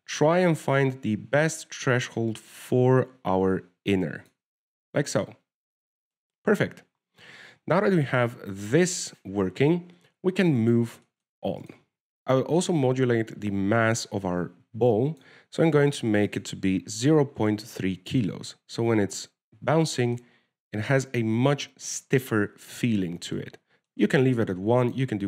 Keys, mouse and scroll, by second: 0.2 shift+click, 6.5 middle click, 7.7-8.5 scroll down 1, 8.5 scroll down 5, 8.7 alt+a, 10.8 w, 11.9 click, 16.2 click, 17.2 click, 17.5 click, 17.6 click, 18.6-18.9 scroll up 2, 19.7 alt+a, 21.2 middle click.